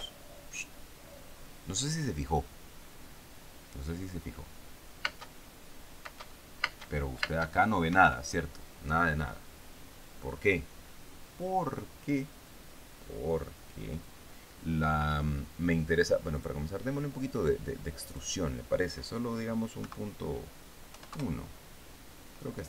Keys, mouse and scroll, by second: 0.3 p, 5.5 space, 6.5 space, 8.4 Escape, 16.8 click, 18.5 click, 20.3 KP_Decimal, 21.4 KP_1, 21.6 KP_Enter.